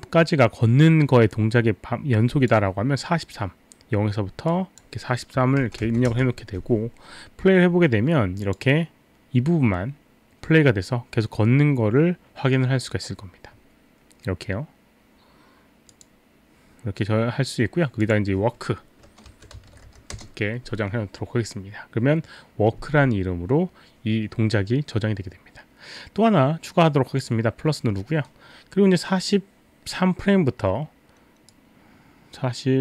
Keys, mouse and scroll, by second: 4.5 click, 5.6 KP_4, 5.9 KP_3, 6.1 Return, 8.5 click, 15.9 click, 18.0 click, 19.1-20.4 typing, 27.2 click, 31.6 click.